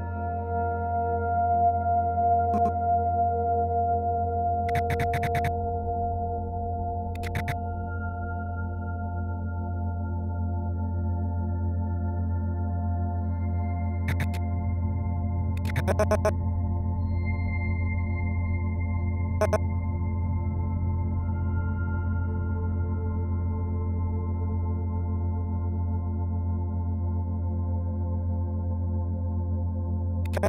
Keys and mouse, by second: 2.5-7.4 drag, 9.9 click, 11.7 click, 14.0-16.6 drag, 18.0 click, 19.3 click, 22.6 click, 23.7 Right, 24.8 click, 26.2 click, 27.5 g, 28.1-30.4 drag.